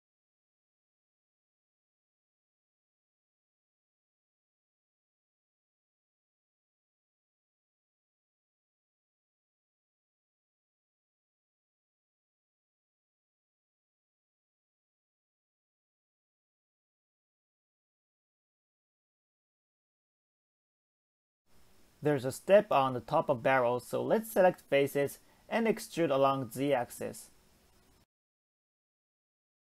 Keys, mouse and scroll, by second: 2.9-3.2 scroll down 2, 3.2 middle click, 4.1 Tab, 4.6 scroll down 3, 4.9-6.1 middle drag, 6.1 Tab, 6.4-6.9 scroll up 1, 6.9-7.9 shift+middle drag, 7.9 click, 8.4 s, 12.0 middle click, 12.7 scroll down 2, 13.0 middle click, 13.7 KP_7, 14.3-15.2 scroll up 6, 15.2 click, 15.7 shift+click, 16.1 shift+click, 16.6 shift+click, 17.2 shift+click, 18.1 ctrl+click, 18.6 shift+click, 19.1 shift+click, 19.6 shift+click, 20.0 shift+click, 20.4 shift+click, 21.0 ctrl+click, 21.4-21.8 scroll down 1, 21.8-23.7 middle drag, 23.7 e, 27.5 scroll down 1, 27.7-29.6 middle drag.